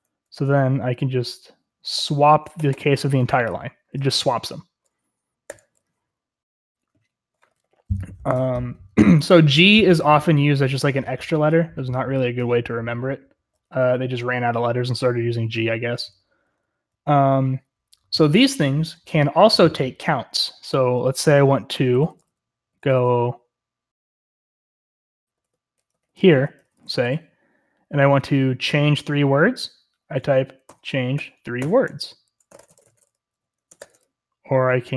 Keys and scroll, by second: 0.0-0.1 typing, 1.9-2.7 typing, 5.4 u, 7.0-8.9 typing, 13.5-16.9 typing, 21.0-22.8 typing, 25.1-27.4 typing, 30.4-34.8 typing.